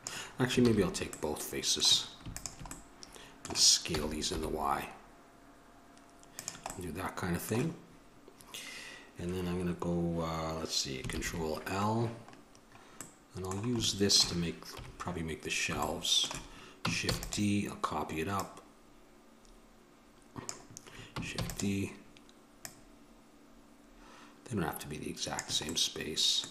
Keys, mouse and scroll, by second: 0.8 ctrl+z, 2.5-4.3 drag, 4.1 s, 11.3 ctrl+l, 14.9 KP_1, 17.3 shift+d, 18.6-20.5 drag, 21.6 shift+d, 25.9-26.5 middle drag.